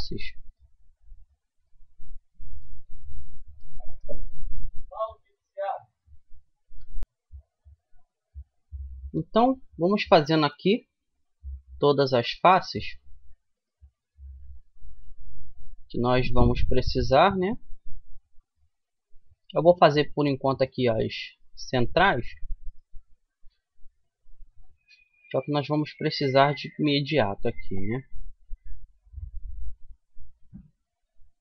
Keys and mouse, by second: 3.6 f, 11.1-14.9 right drag, 14.5 f, 15.1 middle click, 19.0-23.7 drag, 23.1 f, 23.7-29.1 middle drag, 29.2-30.4 right drag, 30.4-31.4 middle drag.